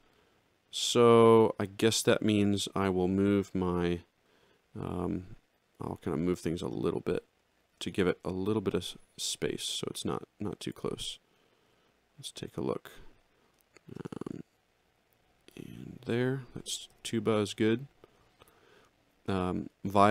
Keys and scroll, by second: 9.0 alt+Up, 11.6 ctrl+-, 14.7 alt+Up, 16.9 alt+shift+], 18.3 x.